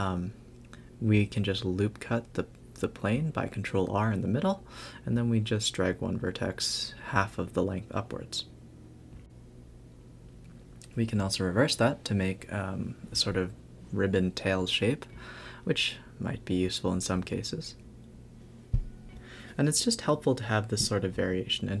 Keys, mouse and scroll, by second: 0.0-2.9 typing, 1.8 click, 4.0 ctrl+z, 4.3 a, 4.3 a, 8.7 click, 12.5 click, 12.7 shift+d, 13.4 Tab, 13.6 click, 13.9 g, 14.4 Tab, 14.7 scroll up 1, 14.8-15.2 scroll down 1, 15.3 scroll up 1, 15.6 Tab, 15.8 Tab, 16.9-17.2 scroll down 2, 17.2-17.7 scroll up 6, 17.7 scroll down 1, 18.1 click, 18.5-18.8 scroll up 3, 18.8-19.5 scroll down 3, 19.5 a, 19.6 a, 20.2 click, 20.6 click, 20.8-21.8 typing, 21.3 Tab, 21.4 scroll up 3.